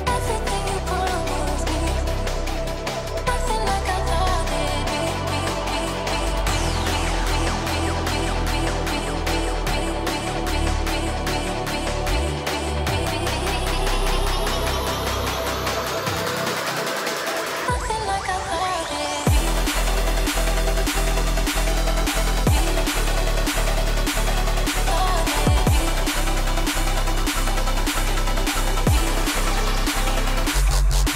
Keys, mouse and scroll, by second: 0.6 g, 0.9 scroll down 1, 1.3 g, 1.9 ctrl+g, 4.6 double click, 10.1 double click, 10.3 F2, 14.9 double click, 15.0 shift+F2, 15.8 double click, 16.0 F2, 18.6 shift+F2, 20.6 ctrl+click, 23.2 shift+Page_Up, 23.9 shift+click, 24.3-25.0 typing, 25.0 shift+click, 25.5 shift+F2, 27.2 double click, 27.7 ctrl+click, 28.1 double click, 28.4 ctrl+z, 28.8 right click.